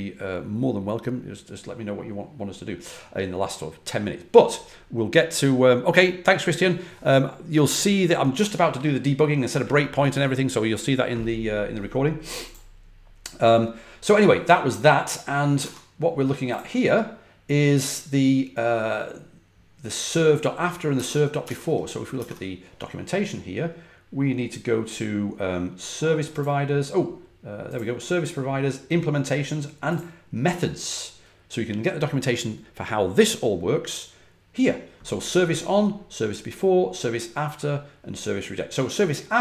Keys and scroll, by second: 15.5 super+Tab, 20.9 super+Tab, 21.4 super+Tab, 22.1 super+Tab.